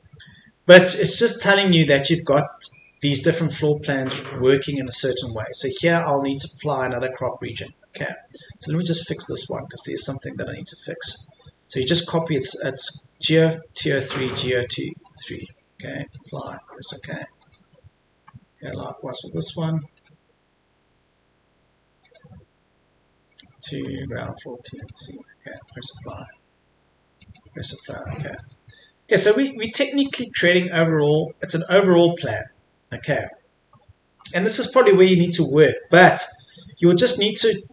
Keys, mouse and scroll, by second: 1.7-4.1 scroll down 1, 4.1-4.9 scroll up 1, 4.9-7.0 scroll down 1, 7.0 middle click, 7.6-8.0 scroll up 1, 9.2-13.7 drag, 19.9 click, 30.1-31.3 scroll down 1, 31.3 middle click, 32.0-33.7 scroll up 1, 33.7-37.7 middle drag.